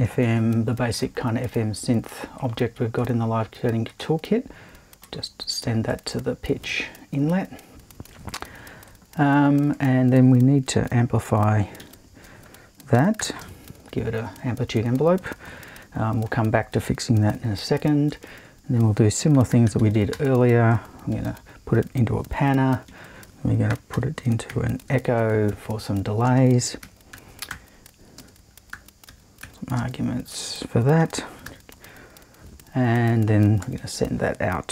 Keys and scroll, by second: 0.2 shift+`, 11.8 super+i, 13.2 shift+8, 14.2 shift+`, 18.2 super+i, 19.3-21.1 typing, 22.9 super+i, 23.7-25.0 typing, 26.2-31.4 typing, 33.8 super+i.